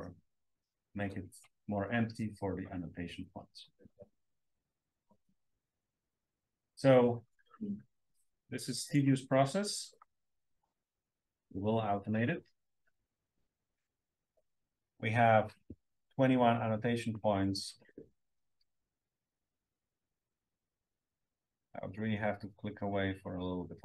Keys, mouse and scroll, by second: 0.2 scroll up 2, 0.5-2.6 scroll down 2, 2.6-3.1 scroll down 1, 3.7-4.5 scroll down 1, 4.5 click, 6.6 drag, 7.6 click, 8.0 drag, 8.8 click, 9.3 drag, 9.9 drag, 10.7 click, 11.8-15.1 scroll down 2, 12.9 drag, 15.1-17.3 scroll down 1, 17.3-18.2 scroll down 1, 18.2-19.3 scroll up 1, 19.9-20.3 drag, 20.7-21.0 drag, 21.2 drag, 21.8 drag, 22.5 drag, 23.2 click, 23.7 drag.